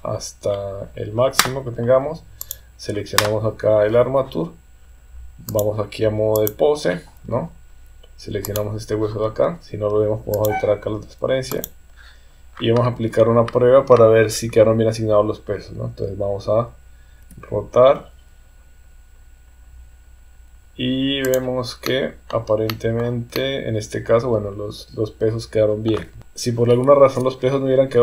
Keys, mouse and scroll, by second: 2.4 click, 5.6 click, 8.4 click, 10.3 click, 11.6 click, 17.2 r, 21.8 middle click, 22.7 middle click, 23.3-25.9 middle drag, 26.2 KP_3.